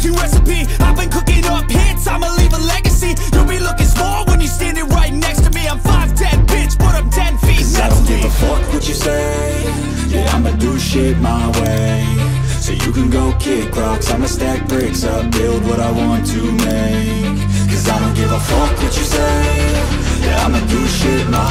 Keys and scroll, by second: 15.1 0.